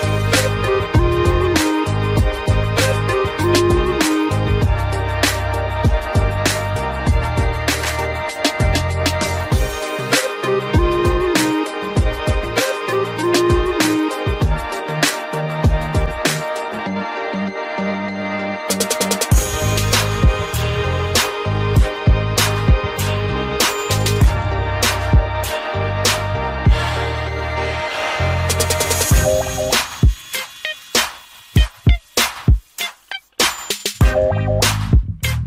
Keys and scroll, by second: 21.4 ctrl+alt+z.